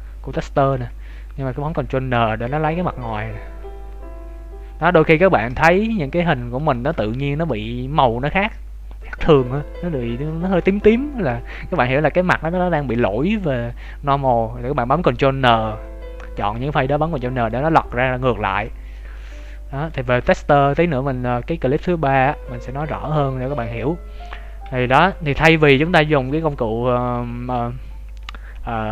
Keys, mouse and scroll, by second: 0.7 Tab, 1.7 ctrl+n, 2.3 Tab, 2.7-3.1 scroll down 3, 3.0 middle click, 4.9 Tab, 6.3 scroll up 2, 6.7 shift+middle click, 11.9 middle click, 16.9 middle click, 20.3 middle click, 20.4 shift+middle click, 24.3-25.0 scroll down 2, 24.6 Tab, 25.0-27.1 scroll up 2, 25.4 Tab.